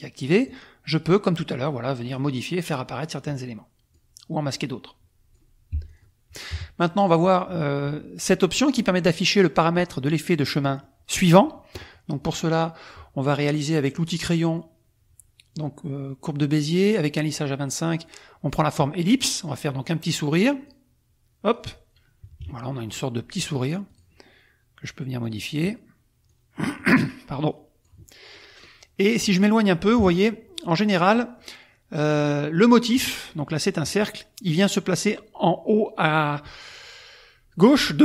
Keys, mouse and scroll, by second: 0.4-2.3 drag, 3.1 click, 4.6 click, 5.7 F1, 5.9 click, 6.5 KP_Subtract, 7.2 click, 10.9 click, 12.6 click, 13.9 click, 18.8 click, 20.6 click, 22.2 KP_Subtract, 23.8 click, 25.2 click, 26.3 click, 27.4-28.0 drag, 28.3-28.8 drag, 29.9 KP_Subtract, 30.6 click, 31.1 click.